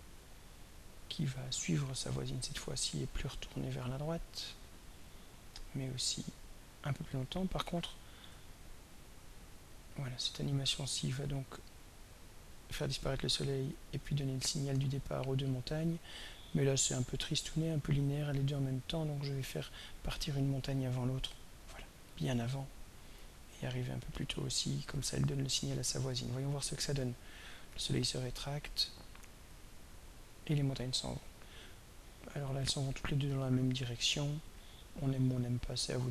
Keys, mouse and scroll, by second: 1.7-4.1 drag, 6.0-7.8 drag, 10.7-20.7 drag, 21.6-23.1 drag, 24.0-25.0 drag, 26.0-34.9 drag, 35.8 click.